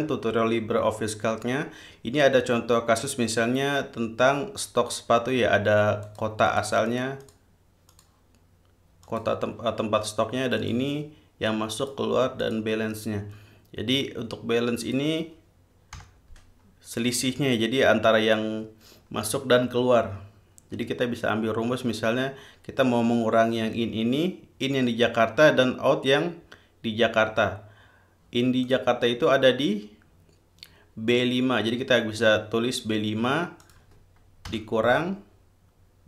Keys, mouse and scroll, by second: 6.3 click, 6.8 click, 7.1-7.8 drag, 8.2 click, 9.3 click, 10.9 click, 12.1 click, 12.7 click, 15.1 click, 16.2 =, 28.9 click, 33.9 click, 34.8 -.